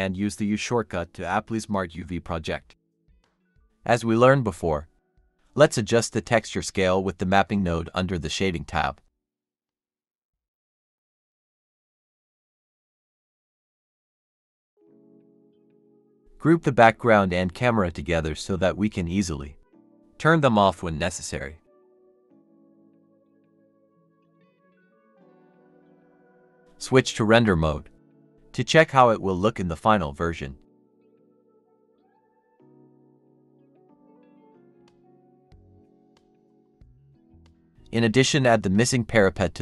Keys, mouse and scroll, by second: 0.0-0.5 scroll down 1, 0.6-2.1 typing, 0.8 Tab, 3.0 Tab, 3.4 typing, 6.8 scroll up 1, 7.3 typing, 8.8-10.1 typing, 10.2 Return, 12.3 typing, 12.6 Return, 13.4 typing, 13.6 Return, 13.9-14.9 scroll down 1, 16.2 scroll down 1, 17.8 ctrl+click, 18.6 typing, 19.7-20.9 typing, 24.7-25.4 scroll down 1, 27.3 scroll down 1, 36.0 double click, 36.1 x, 38.3 typing.